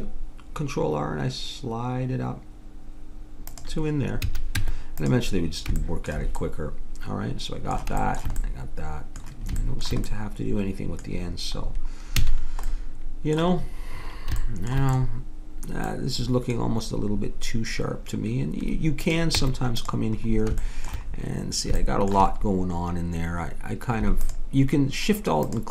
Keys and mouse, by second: 4.3 a, 4.6 Tab, 12.2 a, 19.0 click, 19.3 Tab, 20.2 click, 25.4-25.7 drag.